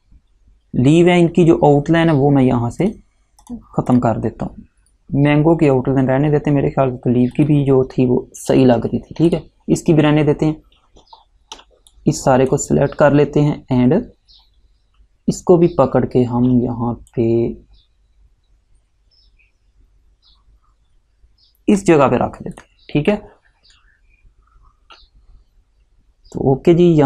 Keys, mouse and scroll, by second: 7.5 click, 9.4 click, 11.3-11.7 alt+scroll down 1, 12.0 click, 17.2 click.